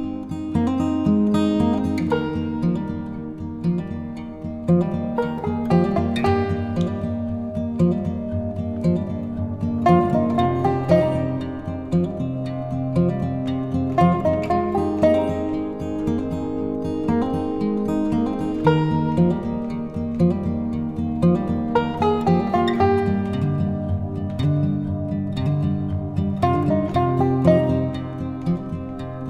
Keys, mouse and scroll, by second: 2.1 click, 6.7-10.9 drag, 10.9-14.8 drag, 15.1-18.8 drag, 27.5 click, 28.2 click.